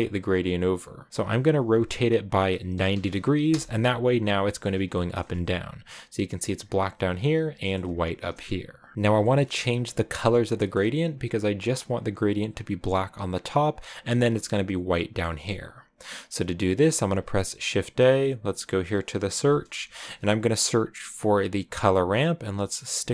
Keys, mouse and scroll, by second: 0.0 click, 1.1-3.4 drag, 3.6 click, 4.6 shift+middle click, 5.2-5.6 scroll up 2, 8.9 KP_0, 9.1-10.6 shift+middle drag, 10.6 scroll up 1, 11.7 scroll up 1, 13.4-13.8 scroll up 1, 13.8-15.2 scroll down 2, 15.2-16.5 middle drag, 16.5 scroll down 2, 16.8 shift+a.